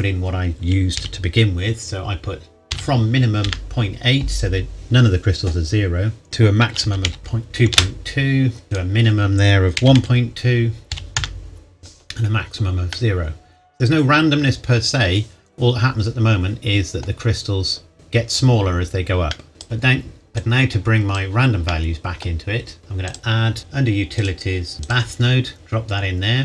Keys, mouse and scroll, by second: 1.0 KP_Decimal, 2.7 KP_8, 3.4 KP_Enter, 6.2 click, 6.6 KP_2, 6.8 KP_Decimal, 7.1 KP_2, 7.7 KP_Enter, 9.8 KP_1, 9.9 KP_Decimal, 10.9 KP_2, 11.2 KP_Enter, 12.9 middle click, 19.3 middle click, 19.5 click, 21.7 middle click, 23.0 click.